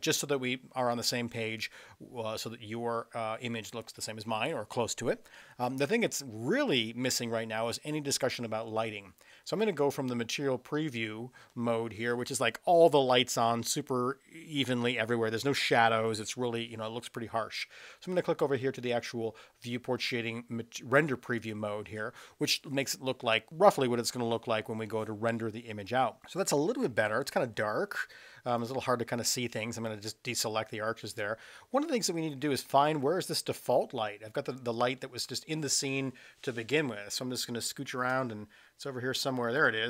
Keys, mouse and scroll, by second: 21.4 click, 28.5 click, 35.0-35.4 middle drag, 36.7 space, 39.5 click.